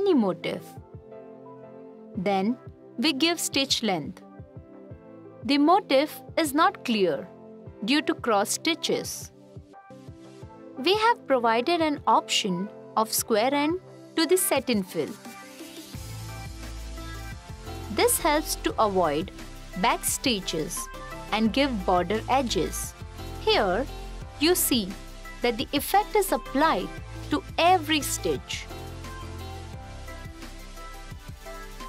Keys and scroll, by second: 23.7 f.